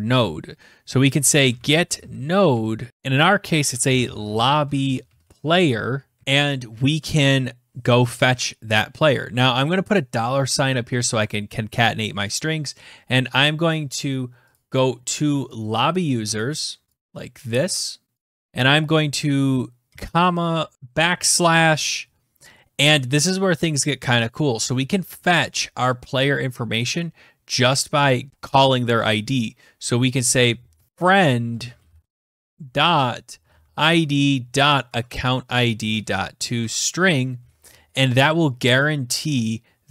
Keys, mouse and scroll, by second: 0.7-6.7 typing, 8.9 Return, 9.2-10.3 typing, 14.1 click, 15.9 click, 16.5 click, 17.7 click, 17.9 ctrl+c, 18.3 click, 18.4 ctrl+v, 24.2 typing, 29.5-33.9 typing, 34.3 Tab, 35.1-38.4 typing, 36.0 Tab.